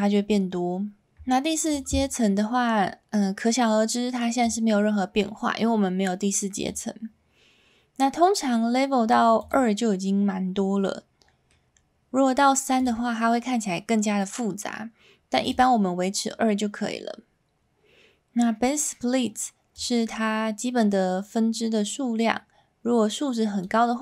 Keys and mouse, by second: 4.4-6.6 drag, 9.4 click, 10.8-11.5 middle drag, 19.8-23.7 drag.